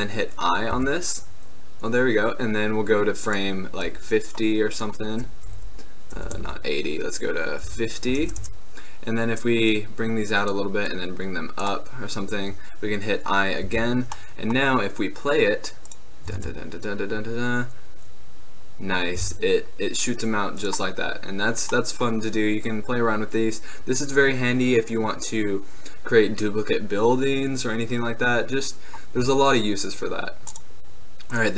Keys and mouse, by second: 0.8 i, 3.3-8.5 drag, 9.8-15.2 drag, 13.7 i, 16.4 alt+a, 19.3 alt+a, 20.7-22.5 drag, 22.5-28.3 middle drag, 30.6-31.5 drag.